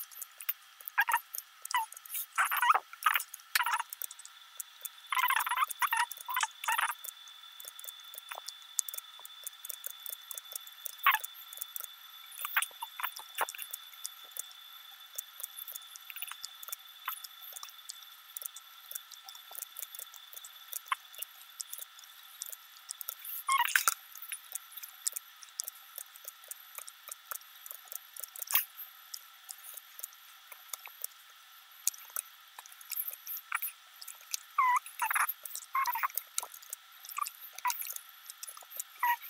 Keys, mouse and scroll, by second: 0.0 s, 0.5 middle click, 0.7 g, 0.9 click, 1.3 alt+click, 1.5 alt+click, 1.6 g, 1.8 middle click, 2.2 scroll down 3, 2.4 s, 2.5 middle click, 2.9 scroll up 7, 3.3 click, 3.6-8.3 typing, 3.8 scroll down 2, 3.8 middle click, 4.3 click, 5.2 click, 5.4 middle click, 5.7 click, 6.1 click, 6.3 middle click, 6.5 click, 6.8 click, 6.9 click, 7.1 click, 7.4 click, 8.0 click, 8.2 click, 8.4 click, 8.6 click, 8.8 middle click, 9.1 middle click, 9.3 click, 9.4-12.9 typing, 9.7 click, 9.9 click, 10.1 click, 10.3 click, 10.5 click, 10.7 click, 11.0 click, 11.3 click, 11.4 scroll down 2, 11.6 click, 12.0 click, 12.8 click, 13.1 scroll down 1, 13.2 middle click, 13.7 scroll up 3, 13.8 middle click, 14.1 click, 14.2-21.2 typing, 14.4 middle click, 14.6 click, 14.8 click, 15.4 click, 15.6 click, 16.1 click, 16.3 scroll down 2, 16.4 middle click, 17.0 click, 17.6 middle click, 17.9 click, 18.1 middle click, 18.4 scroll up 2, 18.5 middle click, 18.8 click, 19.3 click, 19.6 middle click, 19.8 middle click, 20.2 click, 20.4 click, 20.7 click, 21.1 click, 21.4 click, 21.6 click, 21.9 middle click, 22.1 click, 22.2 g, 22.5 middle click, 23.1 scroll down 2, 23.1 g, 23.2 middle click, 23.4 click, 23.5 g, 23.7 click, 23.8 middle click, 24.0 click, 24.5 ctrl+r, 25.0-28.4 typing, 25.3 scroll up 3, 25.4 middle click, 25.9 middle click, 26.3 click, 26.9 click, 27.2 click, 27.5 click, 27.7 click, 28.1 click, 28.3 click, 28.6 click, 28.8 click, 29.0 scroll down 3, 29.1 middle click, 29.7 middle click, 30.1 click, 30.2 g, 30.4 click, 30.5 g, 30.7 click, 31.0 alt+click, 31.2 scroll down 2, 31.5 c, 32.6 g, 33.1 middle click, 33.6 g, 33.8 middle click, 34.5-34.9 scroll up 4, 34.7 shift+middle click, 34.9 click, 35.4 click, 35.6 click, 35.9 c, 36.6 c, 36.9 middle click, 37.1 g, 37.5 middle click, 37.9 click, 38.2 shift+click, 38.2 middle click, 38.4 g, 38.7 middle click, 38.9 g, 39.2 click.